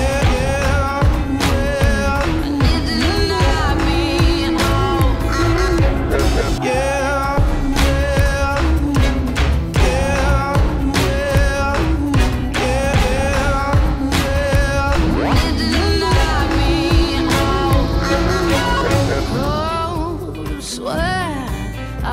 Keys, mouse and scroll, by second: 0.0-1.0 drag, 2.2 click, 2.9 click, 4.2 click, 8.4 click, 9.5-10.9 drag, 14.7 click, 17.7 click, 18.8 ctrl+z, 19.1 click, 20.4 ctrl+z, 21.4 click.